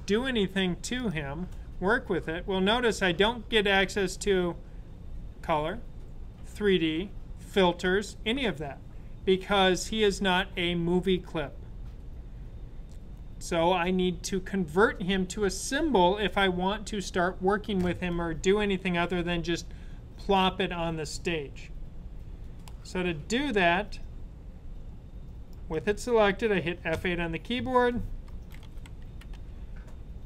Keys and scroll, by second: 27.0 F8, 28.3-29.8 typing.